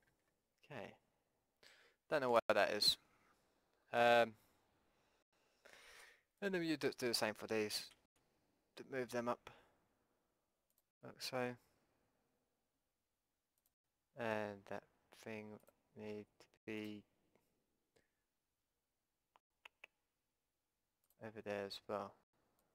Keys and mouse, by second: 0.1 ctrl+z, 1.5-3.5 middle drag, 3.6 middle click, 3.8-6.4 middle drag, 6.0 b, 7.9 g, 13.7-15.5 drag, 15.5 middle click, 15.7-18.7 drag, 18.7 middle click, 22.6-22.7 drag.